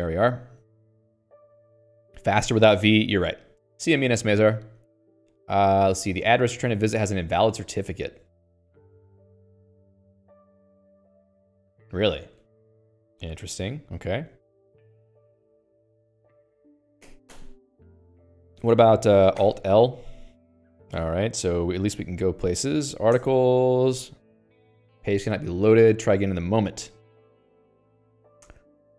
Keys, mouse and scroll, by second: 8.4 Return.